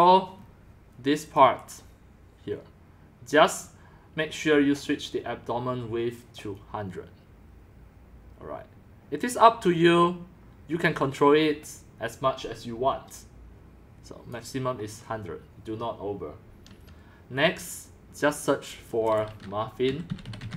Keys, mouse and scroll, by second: 0.4 scroll, 0.6 scroll, 1.4 click, 1.6 BackSpace, 6.5 click, 14.3-20.2 drag, 19.6-20.5 typing.